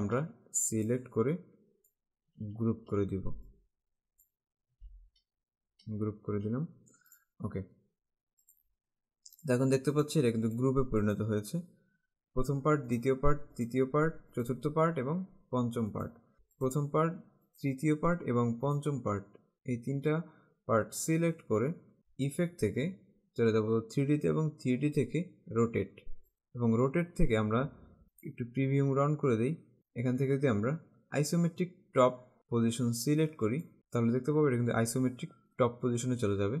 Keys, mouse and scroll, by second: 0.9 click, 2.8 ctrl+g, 3.5 click, 6.3 g, 7.1 click, 8.6 click, 13.1 click, 16.0 click, 16.8 click, 17.5 click, 22.5 click, 26.3 click, 28.2 click, 29.8 click, 33.6 click.